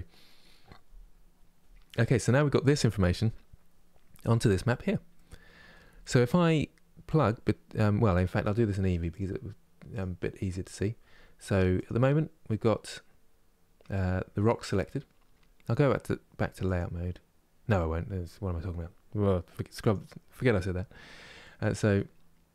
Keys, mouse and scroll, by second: 1.6-3.0 scroll down 10, 7.8 click, 9.8-10.8 drag, 10.8 scroll up 2, 11.6 click, 19.5-20.6 drag, 20.6 scroll down 5, 21.3-22.5 middle drag.